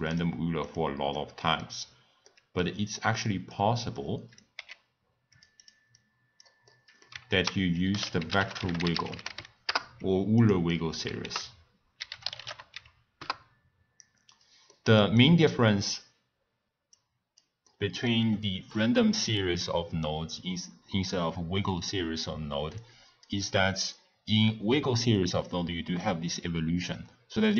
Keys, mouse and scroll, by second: 0.0 click, 0.6 click, 1.1-2.9 middle drag, 2.9 click, 4.0 click, 4.5 g, 5.6 click, 5.9 click, 6.7 middle click, 7.3 ctrl+a, 9.1 g, 10.7 middle click, 11.2 ctrl+a, 14.7-16.9 middle drag, 16.9 click, 17.7-20.7 middle drag, 22.8-27.5 drag.